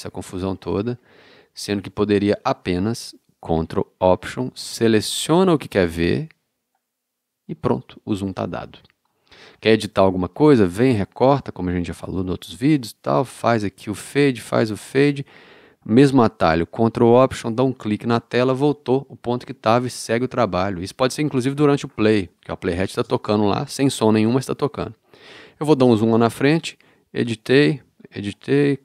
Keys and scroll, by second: 0.0 super+Down, 0.7 super+Up, 1.3 super+Left, 12.0 BackSpace.